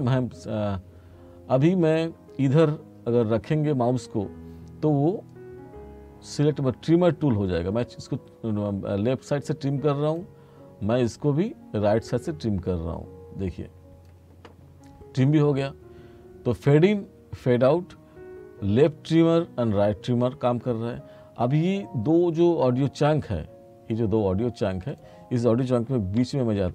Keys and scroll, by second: 26.3 t.